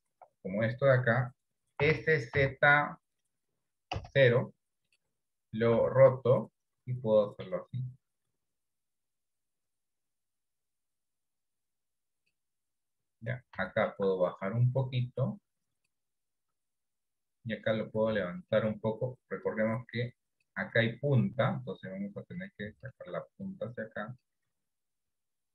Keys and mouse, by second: 1.9 s, 6.0 r, 14.7-16.0 drag, 19.6 click, 23.5 click.